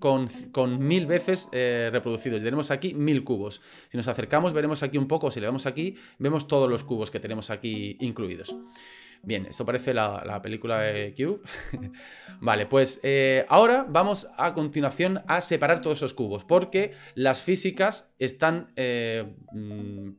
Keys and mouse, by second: 0.0-2.3 middle drag, 2.6-3.6 middle drag, 4.3-4.6 shift+middle drag, 5.6 click, 6.5-8.5 middle drag, 9.8-11.2 middle drag, 12.4 click, 17.9 middle drag.